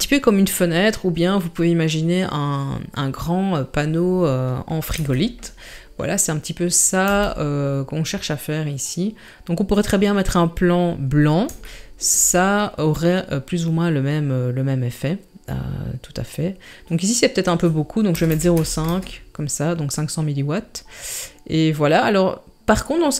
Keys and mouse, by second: 5.0 KP_7, 7.1 g, 11.7-12.0 shift+middle drag, 17.5-18.9 drag.